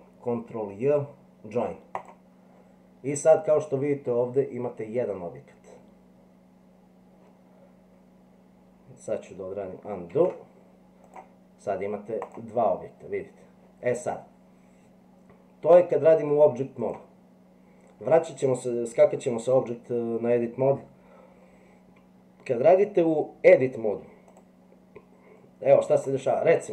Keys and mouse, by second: 10.1 ctrl+z, 11.1 click, 16.8 click, 23.5 Delete.